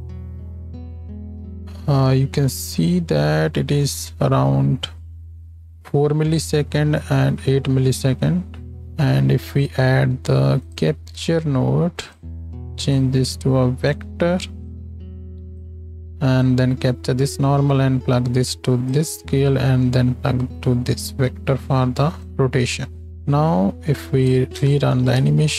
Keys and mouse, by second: 4.6 space, 9.1 shift+a, 12.2 click, 24.5 shift+Left, 25.2 space.